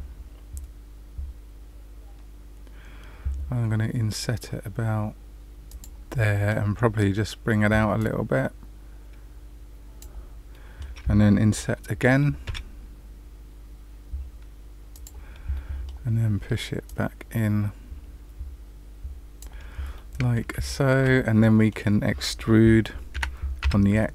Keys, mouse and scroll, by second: 6.2 middle click, 7.9 click, 10.5 middle click, 12.4 i, 15.5 middle click, 16.8 click, 20.3 middle click, 20.6 shift+middle click, 21.4 middle click, 23.1 e.